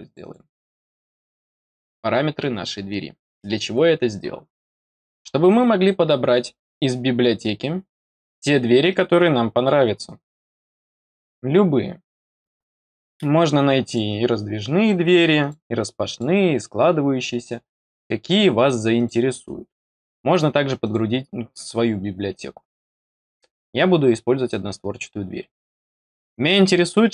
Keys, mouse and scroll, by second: 0.0 click, 0.2 click, 8.1 scroll down 2, 9.6 scroll up 2, 9.8-11.0 scroll down 6, 13.8 click, 15.3 click, 16.0 click, 17.8 click, 18.9 click, 19.5 scroll down 2, 20.7 click, 27.0 click.